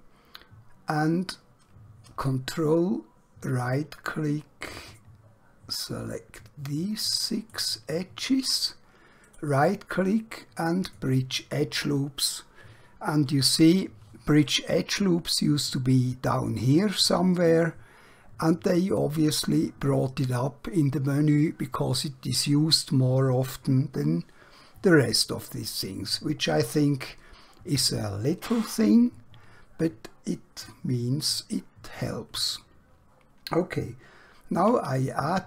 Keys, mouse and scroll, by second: 1.0 2, 2.2 ctrl+Num_Lock, 3.5 ctrl+right click, 9.2 right click, 10.7 click, 14.4 right click, 33.8 alt+Num_Lock, 34.6 alt+q.